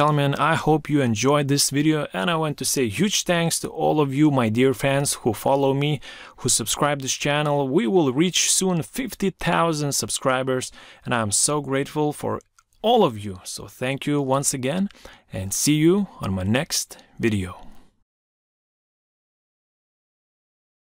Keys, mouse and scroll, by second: 0.2 Right, 3.5 Right, 7.7 Right, 12.0 Right.